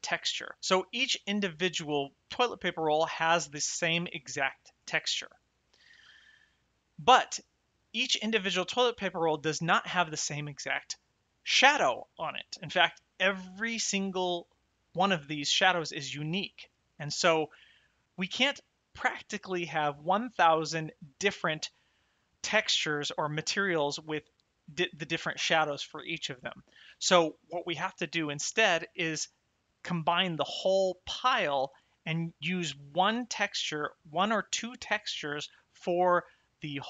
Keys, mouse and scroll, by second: 0.5 click, 3.4 click, 7.9 click, 17.4 shift+middle click.